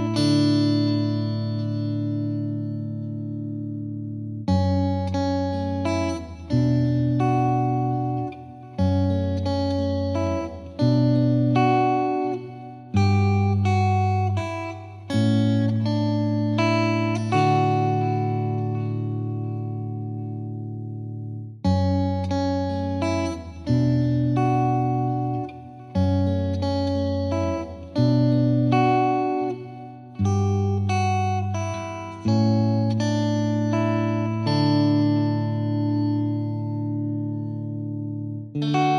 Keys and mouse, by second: 1.5 click, 2.1 click, 2.2 ctrl+z, 2.7 click, 2.8 click, 3.4 click, 4.1 click, 4.2 shift+click, 4.4 shift+click, 4.8 right click, 5.3 click, 6.6 click, 9.8 click, 10.1 click, 10.7 click, 11.2 click, 11.8 click, 12.4 Delete, 12.8 click, 13.3 click, 13.7 click, 13.9 click, 14.8 click, 15.4 click, 15.8 F3, 16.1 F3, 16.4 F2, 16.9 click, 19.4 F2, 20.1 click, 21.6 click, 23.2 click, 23.7 F3, 24.0 click, 24.5 click, 24.5 click, 25.4 click, 26.3-28.1 typing, 26.5 click, 27.1 click, 27.9 click, 29.2 click, 29.5 click, 30.0 click, 31.0 click, 31.5 ctrl+r, 31.8 click, 32.1 ctrl+r, 32.5 click, 33.0 click, 33.4 shift+click, 34.2 click, 34.5 click, 34.8 shift+click, 35.1 click, 35.3 click, 36.7 click, 37.5 click, 37.8 F2, 38.3 click.